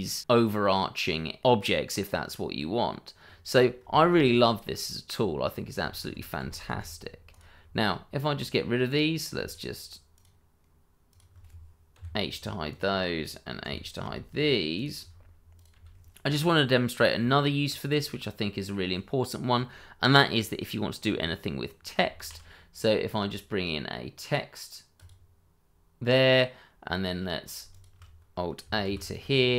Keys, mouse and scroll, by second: 0.3 middle click, 2.1-2.5 scroll up 1, 2.5 middle click, 3.2 scroll down 1, 3.5 click, 3.9 shift+middle click, 4.3 scroll up 1, 6.0 ctrl+z, 7.3 click, 7.5 scroll down 1, 7.8 middle click, 8.3-8.8 scroll up 1, 8.8 click, 9.4 shift+click, 11.1 shift+click, 11.9 h, 12.7 click, 13.6 h, 13.8 click, 14.0 h, 14.7 click, 14.9 h, 15.5 click, 15.7 h, 16.1-16.6 scroll down 1, 16.6 middle click, 17.2 shift+middle click, 17.6 scroll up 1, 17.9 middle click, 22.2 shift+a, 25.0 click, 27.7 shift+click.